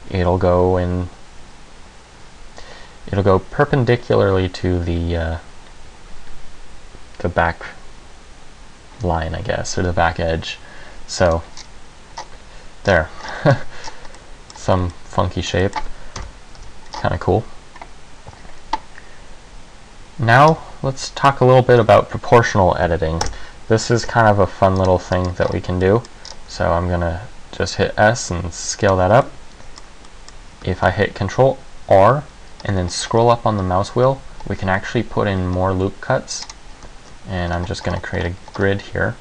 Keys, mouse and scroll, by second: 11.5 click, 11.7-12.3 scroll down 2, 12.3-13.0 scroll down 1, 13.0 scroll down 1, 13.2 scroll down 1, 13.4-13.7 scroll up 2, 13.7 Tab, 13.7-14.2 scroll down 2, 14.3 middle click, 14.8 z, 15.1 middle click, 15.8 middle click, 16.4 KP_1, 16.7 z, 17.1-17.7 scroll up 4, 20.7 Tab, 21.2 middle click, 21.9 Tab, 23.0 Delete, 24.1 shift+a, 25.3 scroll down 2, 25.5-25.9 scroll up 4, 26.0 middle click, 26.4 scroll down 1, 26.6 s, 29.1 click, 29.1 Tab, 29.4 middle click, 30.2 middle click, 30.9 ctrl+r, 36.7 click, 37.1 ctrl+r.